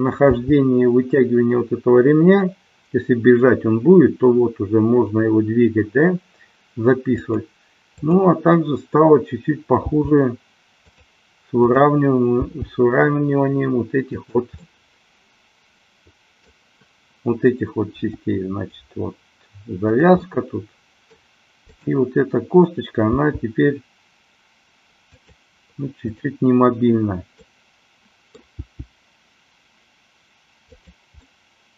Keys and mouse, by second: 0.5 g, 7.3 click, 8.0-9.3 drag, 9.9 g, 11.0 click, 11.8-12.8 drag, 13.0 g, 14.7-16.7 middle drag, 17.9 g, 20.2 click, 20.3-21.2 middle drag, 21.8 click, 23.2 g, 26.2-26.9 drag, 27.4-29.0 middle drag, 28.8 g, 30.8 click, 31.3-31.7 middle drag.